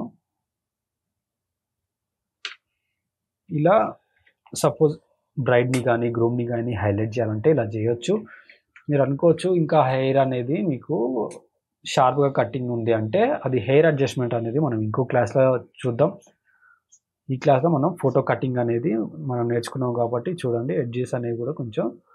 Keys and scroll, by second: 2.4 Return, 3.8 ctrl+=, 4.8 space, 5.3 space, 8.4 ctrl+=, 9.9 space, 10.4 space, 15.8 space, 16.3 space.